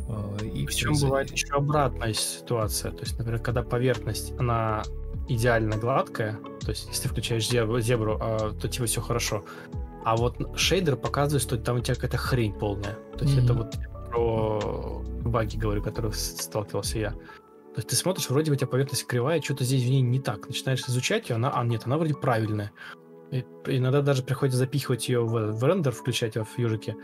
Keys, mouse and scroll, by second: 1.1 Left, 1.8 Right, 3.1 Delete, 3.5 ctrl+space, 4.5 ctrl+super+c, 7.7 shift+click, 7.8 shift+double click, 8.7 ctrl+click, 11.3 Escape, 11.5 ctrl+z, 12.8 ctrl+click, 13.2 ctrl+double click, 15.8 ctrl+z, 18.3-19.4 typing.